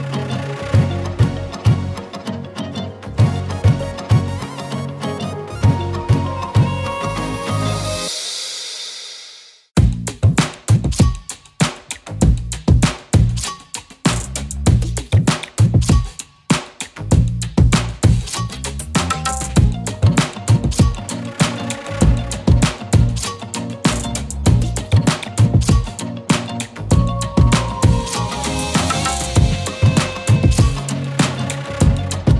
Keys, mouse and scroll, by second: 0.0-0.7 typing, 4.1 space, 7.1 click, 8.4 z, 8.7 click, 8.9 z, 9.1 space, 9.2-10.1 drag, 15.3-16.5 alt+shift+click, 20.8 Return, 24.0 z, 24.1 click, 25.3-26.2 alt+shift+click, 30.0 scroll down 1.